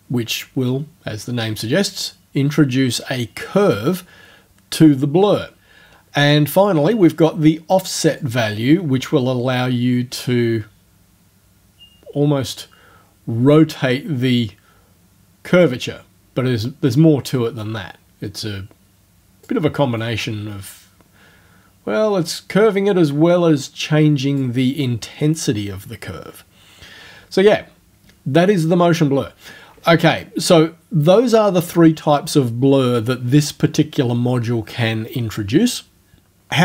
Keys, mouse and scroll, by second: 8.2-15.8 drag, 16.9-19.6 drag, 20.0-24.6 drag, 31.0 click.